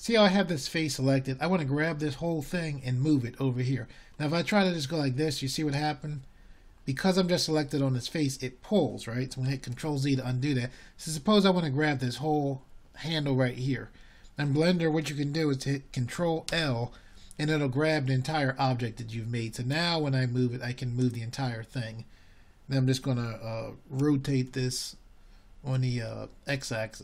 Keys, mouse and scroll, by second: 1.0-11.1 middle drag, 14.4-19.6 drag, 19.6 ctrl+z, 26.5 ctrl+l.